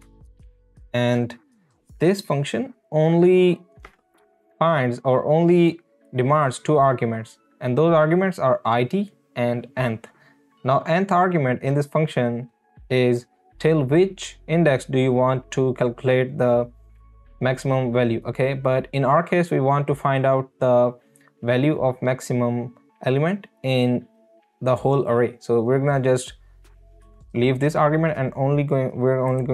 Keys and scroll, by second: 0.0 Return.